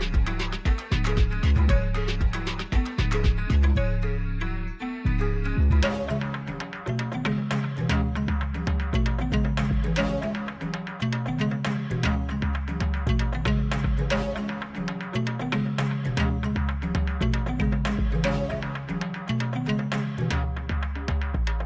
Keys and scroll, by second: 3.4 shift+a, 5.1 Tab, 5.9 s, 7.4 Tab, 7.7 g, 8.0 z, 9.4 Tab, 10.0 s, 10.2 z, 14.4 s, 14.6 x, 16.6 s, 17.0 y, 20.9 ctrl+r.